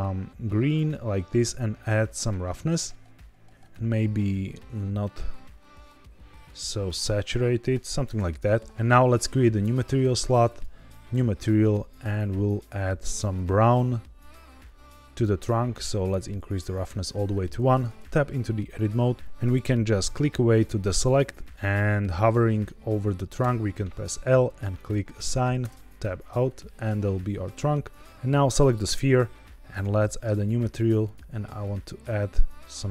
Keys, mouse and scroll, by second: 1.9-3.5 drag, 8.6 click, 9.5 click, 10.4 click, 11.5 click, 15.9 click, 17.4 Tab, 19.1 click, 19.1 l, 19.8 click, 23.3 l, 24.7 click, 25.5 Tab, 28.1 click, 28.6 click, 29.6 click, 30.9 click.